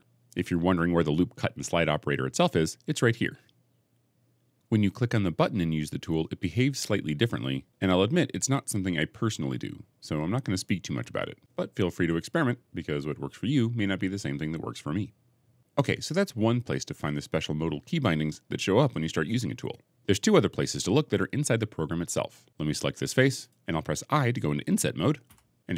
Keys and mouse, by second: 8.1 click, 11.1 click, 12.8 click, 14.8 click, 25.2 i.